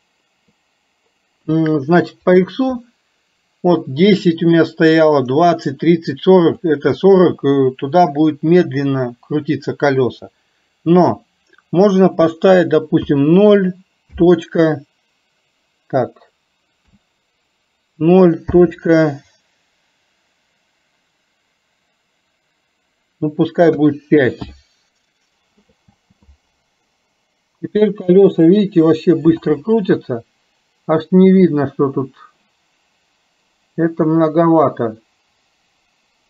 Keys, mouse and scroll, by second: 2.3-24.6 drag.